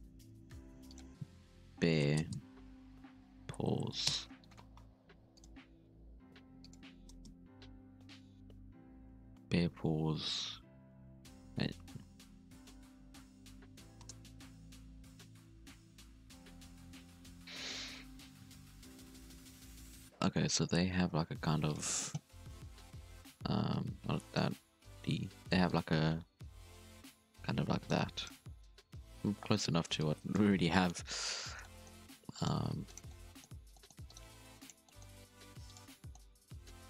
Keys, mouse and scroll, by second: 22.8 c, 25.0-25.6 d, 25.6-27.7 drag, 27.7-28.3 d, 28.8 ctrl+z, 29.9 click, 31.6 middle click, 32.2 2, 32.3 right click, 32.5 g, 33.0 middle click, 33.5 1, 33.7 middle click, 34.0 right click, 34.2 g, 34.8 middle click, 35.1 scroll up 2, 35.3 g, 35.8 scroll down 1, 35.9 middle click, 36.2 Tab, 36.4 middle click, 36.6 scroll down 1, 36.8 Tab.